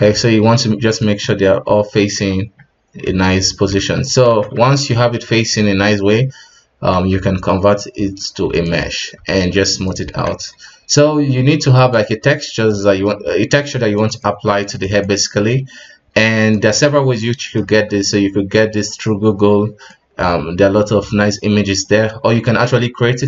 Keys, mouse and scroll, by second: 2.3 KP_1, 3.0 right click, 4.2 alt+a, 4.5 Tab, 4.9-5.6 middle drag, 5.6 w, 6.9 q, 9.2 w, 10.1 alt+a, 10.3 alt+KP_1, 10.5 alt+q, 11.9-13.0 drag, 13.0 scroll up 3, 13.2 KP_1, 13.4-14.0 scroll down 4, 14.0-14.3 middle drag, 14.3-14.6 scroll up 2, 14.6 right click, 15.0-17.7 middle drag, 15.0-19.0 right drag, 17.7 w, 19.9-22.9 middle drag.